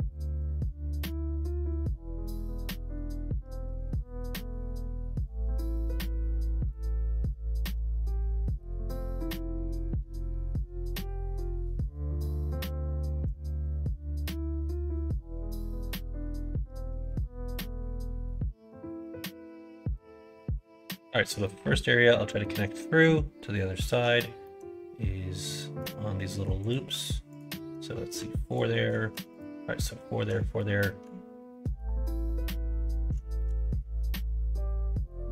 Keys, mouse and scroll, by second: 0.4 ctrl+r, 1.4-2.9 middle drag, 4.0 middle click, 5.1 click, 7.6 shift+click, 8.7 f, 9.9 ctrl+r, 13.2 f, 13.6 middle click, 16.6 middle click, 17.8-20.9 middle drag, 21.4 middle click, 22.2 middle click, 23.8 alt+h, 24.4-25.7 middle drag, 26.6 click, 27.2 alt+click, 28.4 alt+shift+click, 29.2 alt+shift+click, 30.3 middle click, 31.5 ctrl+e, 33.4 shift+middle click, 34.0 middle click, 34.3-35.3 middle drag.